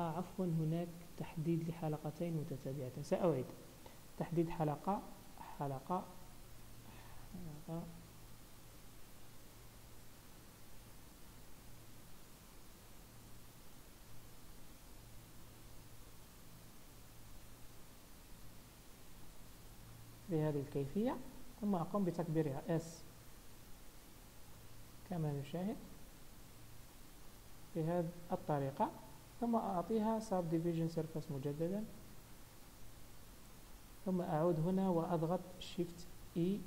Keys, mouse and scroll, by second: 0.5-3.2 scroll up 1, 3.2 click, 4.1 alt+click, 5.5 alt+shift+click, 9.8 ctrl+z, 11.2-19.6 alt+shift+click, 19.8 scroll down 1, 20.6 scroll down 1, 22.1 5, 27.6-28.7 scroll down 6, 28.3 Tab, 28.7-29.9 scroll up 5, 29.9 click, 32.7 click, 33.5 Tab, 33.8 scroll up 1, 35.9 shift+e.